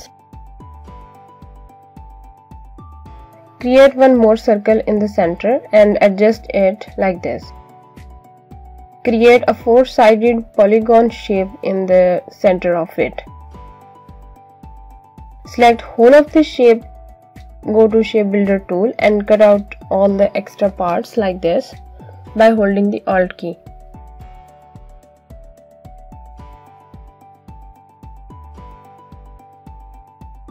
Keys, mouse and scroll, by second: 4.0 ctrl+c, 4.6 ctrl+f, 6.1 click, 8.5 click, 9.7 right click, 10.4 click, 11.7 click, 12.8 Down, 15.4 click, 19.1 alt+click, 21.1-21.7 alt+scroll up 2, 22.2 alt+click, 23.3 alt+click, 24.4 z, 25.5 alt+click, 26.9 click.